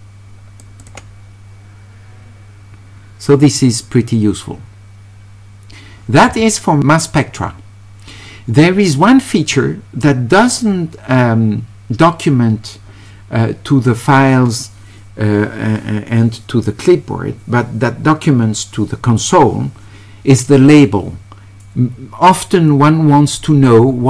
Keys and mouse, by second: 0.8 click.